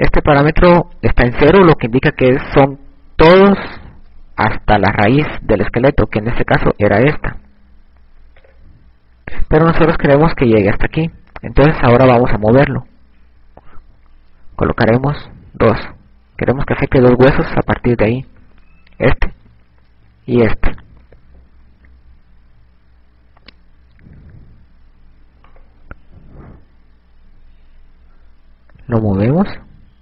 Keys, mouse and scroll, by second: 7.8 click, 8.1 right click, 9.7 click, 16.1 click, 26.1 right click, 28.6 g.